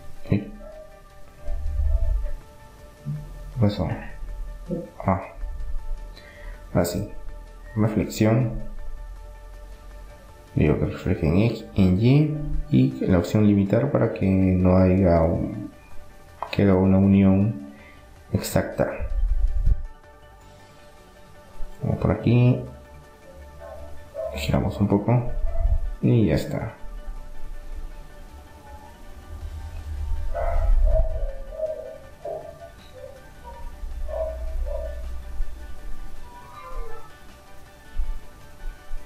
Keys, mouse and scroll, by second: 4.0-5.9 middle drag, 6.3-8.1 drag, 10.7-14.0 drag, 14.0 middle click, 15.7-17.1 middle drag, 16.2 KP_3, 18.2-20.0 middle drag, 19.2 r, 24.7-27.7 middle drag, 29.2 middle click, 32.7-34.2 drag, 33.7 right click, 34.7-38.0 middle drag.